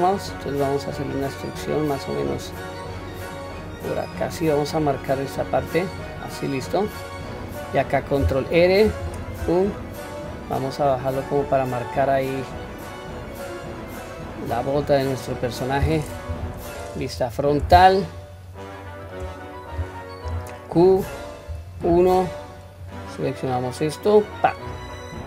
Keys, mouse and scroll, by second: 5.9-6.7 middle drag, 7.1-7.5 middle drag, 8.9 ctrl+r, 14.9-15.8 middle drag, 16.3 KP_1, 16.8-17.6 scroll up 1, 18.1-19.1 shift+middle drag, 20.2 q, 21.5 1, 22.9-24.3 drag.